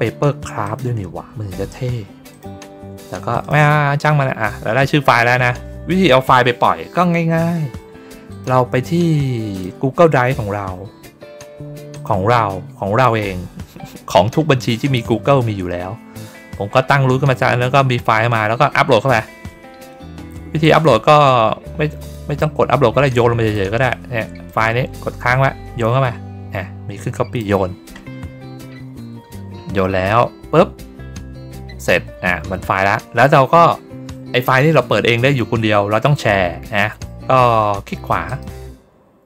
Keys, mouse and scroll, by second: 0.5 click, 2.2 click, 3.3 click, 8.2 click, 9.4 click, 11.8 click, 20.5 click, 21.9 click, 22.9 click, 24.4-27.3 drag, 38.2 right click.